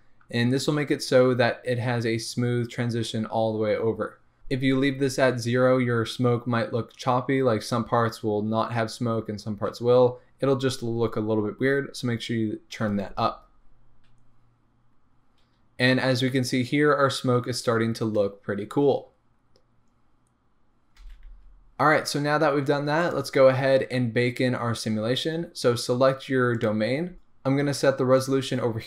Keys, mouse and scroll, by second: 0.9-4.2 scroll up 2, 4.2 scroll up 1, 21.0 space, 23.0 click, 25.9-26.6 scroll down 1, 26.6 click, 28.1-28.8 drag.